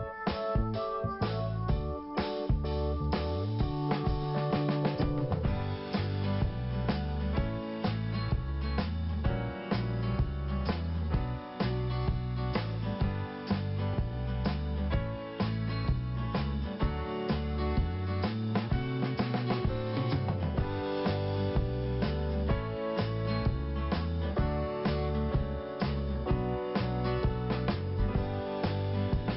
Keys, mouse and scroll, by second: 4.7 click, 4.9 click, 5.1 click, 5.3 click, 5.8 click, 5.9 click, 6.5 click, 10.6 click, 10.7 click, 11.2 click, 11.4 click, 11.7 click, 11.9 click, 12.4 click, 12.5 click, 13.1 click, 21.0 click, 21.3 click, 22.4 click, 23.3 click, 24.1 scroll up 1, 24.9 click, 25.8 click, 26.0 click, 26.3 click, 26.4 click, 27.0 click, 28.0 scroll down 1, 28.5 scroll down 1.